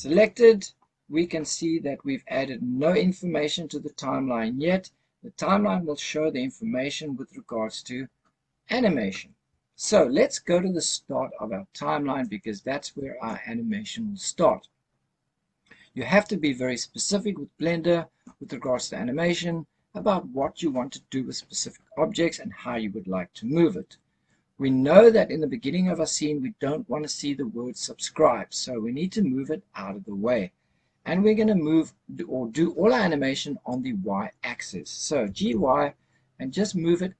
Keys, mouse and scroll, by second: 0.0 click, 12.1 click, 27.9-30.7 scroll down 1, 35.1 g, 35.4 y.